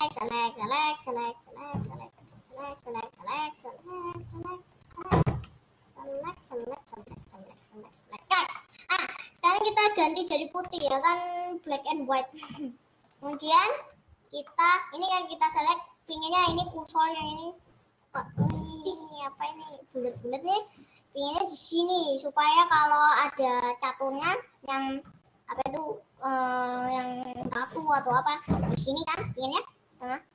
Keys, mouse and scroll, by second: 0.7 click, 1.2 click, 1.4 click, 2.0 click, 2.4 click, 2.8 click, 3.2 click, 4.2 click, 4.4 click, 4.8 click, 5.0-6.3 middle drag, 6.3 shift+click, 6.6 shift+click, 7.2 shift+click, 7.6 shift+click, 8.0 shift+click, 8.5 shift+click, 8.8-10.8 middle drag, 10.8 g, 12.3 click, 12.5 middle click, 13.2 click, 13.4 middle click, 13.8 click, 14.0 scroll up 2, 14.4-30.3 middle drag.